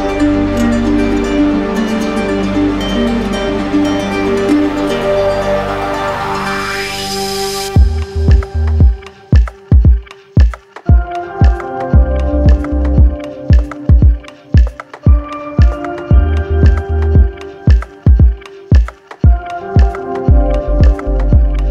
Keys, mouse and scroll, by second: 3.2-4.3 drag, 5.3 click, 6.1 click, 7.5 click, 9.0 click, 10.2 click, 10.9 shift+click, 11.6 alt+click, 13.5-14.6 drag, 14.8-16.0 drag, 16.7-19.5 drag, 20.0-21.1 drag.